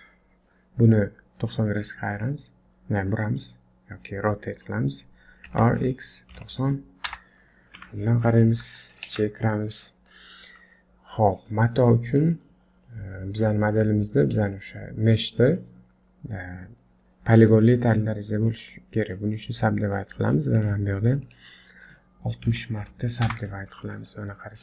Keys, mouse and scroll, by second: 5.5 r, 7.7 KP_1, 8.4 scroll up 4, 8.7 shift+middle click, 9.1 Tab, 9.6-10.2 scroll down 3, 9.8 middle click, 10.2-10.8 scroll up 2, 10.8 scroll down 1, 11.1 middle click, 18.4 right click, 20.6 click, 21.2 click, 24.0 middle click.